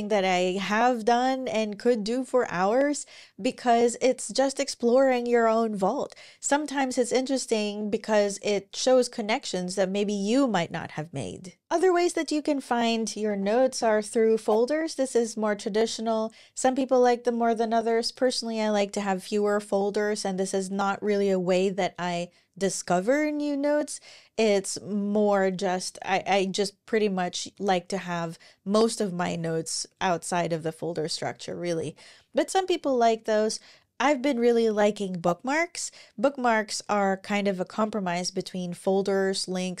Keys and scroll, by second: 13.0 ctrl+super+l, 31.5 ctrl+super+l, 32.2 ctrl+super+r.